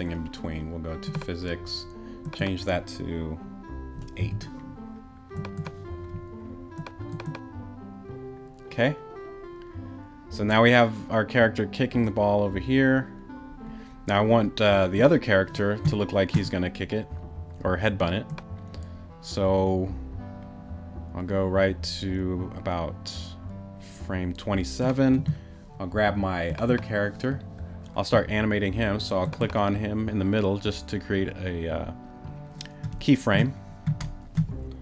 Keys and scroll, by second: 4.2 8.